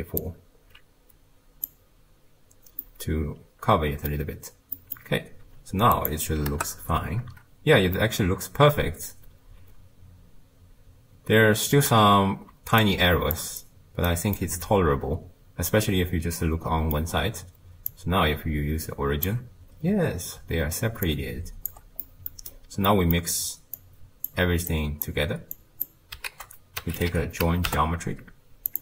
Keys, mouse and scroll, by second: 0.2 alt+click, 2.8-6.0 middle drag, 6.0-8.0 drag, 8.0-11.0 middle drag, 12.1-12.5 scroll up 1, 12.5 d, 12.8 click, 13.4 d, 13.6 right click, 14.1 d, 14.4-17.4 middle drag, 17.9-19.7 shift+drag, 19.7-20.3 scroll down 2, 21.1-22.1 shift+drag, 22.1 middle click, 22.6-22.9 scroll down 3, 22.9 middle click, 23.8 click, 24.7 click, 25.6 click, 26.3 ctrl+a.